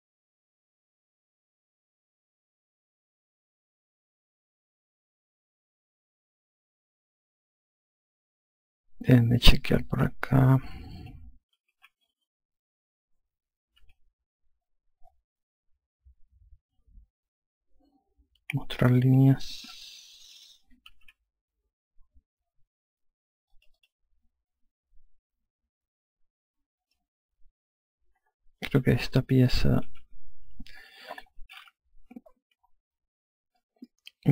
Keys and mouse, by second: 0.2 click, 3.5 click, 4.6 alt+click, 9.7 click, 12.6 F2, 14.7 F3, 17.5 F4, 19.9 n, 21.4-22.3 typing, 24.4 click, 27.8 click, 29.3 alt+shift+click, 32.8 F1.